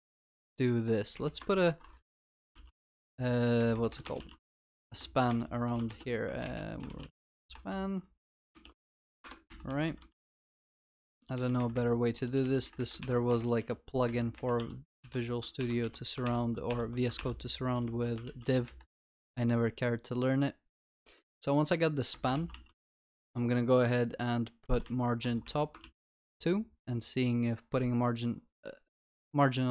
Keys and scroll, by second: 5.9 ctrl+BackSpace, 11.0 alt+shift+Up, 11.2 alt+shift+Down, 11.6 alt+shift+Up, 12.5 alt+shift+Down, 13.0 ctrl+y, 15.0 Delete, 15.6 ctrl+Delete, 16.7 Delete, 17.2 ctrl+Delete, 17.8 ctrl+alt+l, 22.2 ctrl+s, 22.9 Return.